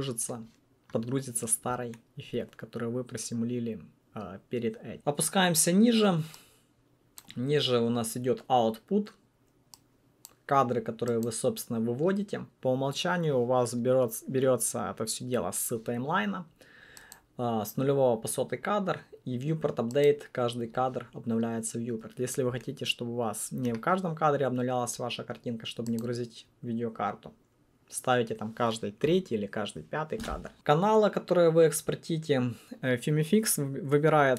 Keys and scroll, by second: 29.2 3.